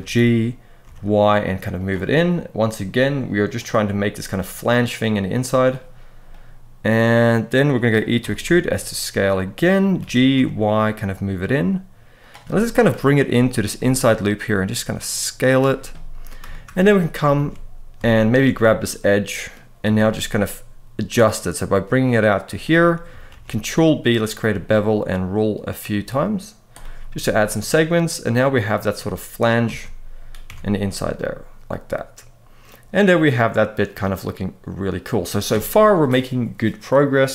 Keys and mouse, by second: 0.6 y, 1.5 click, 6.0-7.4 middle drag, 8.0 e, 8.2 s, 9.5 click, 9.7 g, 10.1 y, 12.0 click, 12.2-12.5 middle drag, 13.1 middle click, 13.8 s, 15.7-16.1 middle drag, 16.3 shift+middle drag, 17.1 alt+a, 18.3-19.3 middle drag, 19.6 g, 19.7 y, 22.2 click, 23.0 ctrl+b, 26.8-28.6 middle drag, 29.4 alt+a, 30.2 Tab, 30.6-34.8 middle drag.